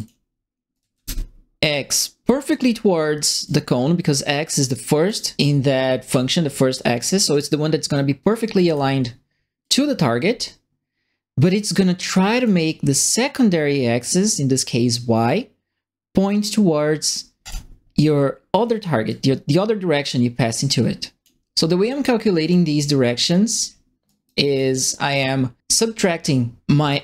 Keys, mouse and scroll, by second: 0.5-1.4 typing, 0.7 right click, 3.4 click, 4.9 click, 8.6 click, 9.6-12.4 drag, 17.4 click, 19.0-21.2 drag, 22.4 click, 23.2 right click, 23.6 middle click, 24.0 right click, 24.5 right click, 25.5 middle click, 26.8 click.